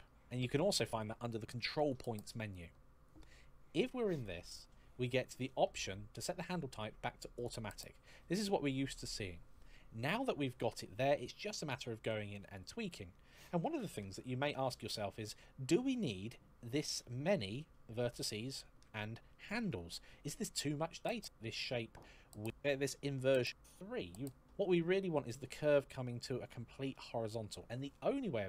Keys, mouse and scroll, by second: 1.5 click, 7.1 click, 15.1 shift+middle click, 16.9-18.3 scroll down 1, 18.3 shift+middle click, 20.9 shift+middle click, 21.8 shift+middle click, 24.2 shift+middle click, 24.2-24.8 scroll down 1.